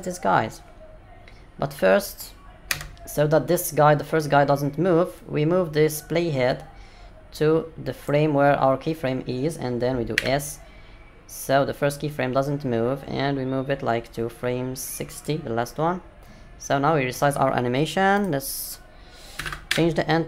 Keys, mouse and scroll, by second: 5.2 click, 10.1 s, 18.1 click.